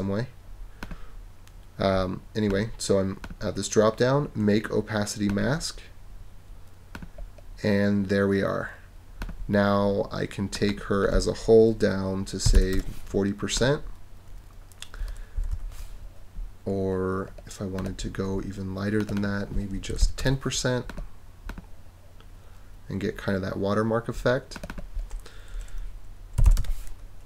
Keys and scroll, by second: 12.2-13.0 typing, 15.4 super+-, 19.7-20.5 typing, 26.1-26.9 typing.